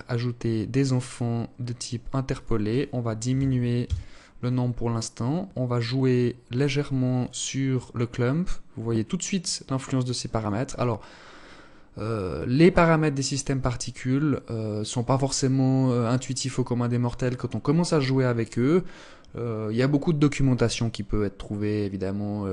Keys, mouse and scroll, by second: 0.3 click, 0.7 scroll down 1, 1.5 click, 3.8-4.4 scroll down 2, 6.3 click.